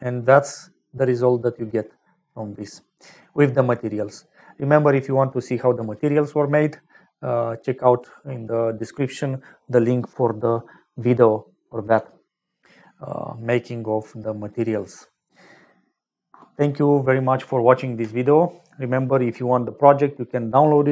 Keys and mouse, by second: 0.0 ctrl+space, 0.9 click, 2.6 middle click, 4.1 middle click, 7.4 click, 7.4 middle click.